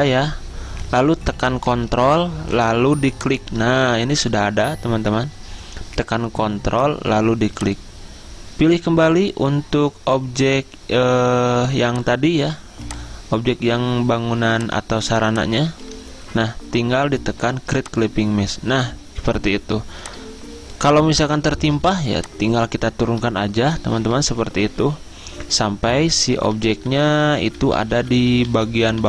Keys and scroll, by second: 0.1 ctrl+z, 19.9 z, 21.9 v, 23.9 ctrl+[, 24.1 ctrl+[, 24.3 ctrl+[, 24.6 ctrl+[, 25.3 ctrl+[, 26.7 ctrl+[, 27.6 ctrl+[, 28.3 ctrl+[, 28.8 ctrl+[.